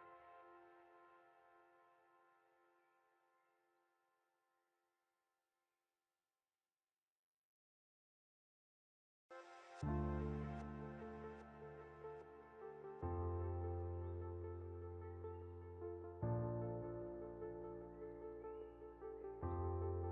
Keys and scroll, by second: 0.9 Left, 1.7 Up, 4.3 Left, 4.7 Up, 5.2 Down, 9.0 ctrl+0, 14.2 ctrl+2.